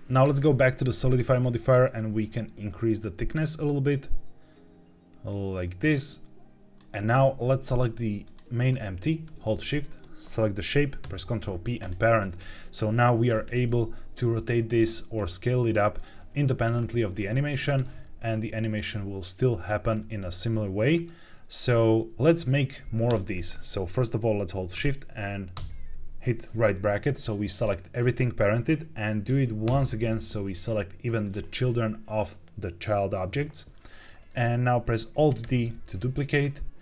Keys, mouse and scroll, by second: 1.0 click, 1.7-6.7 shift+drag, 8.1 click, 8.6-9.2 scroll down 1, 9.5 shift+click, 10.9 ctrl+p, 12.3 click, 12.7-13.2 scroll down 2, 13.2 r, 13.4 r, 14.6 Escape, 15.1 s, 15.9 click, 16.7-17.6 scroll up 2, 17.6 space, 23.0 space, 25.5 shift+], 29.6 shift+], 35.4 alt+d, 36.2 right click.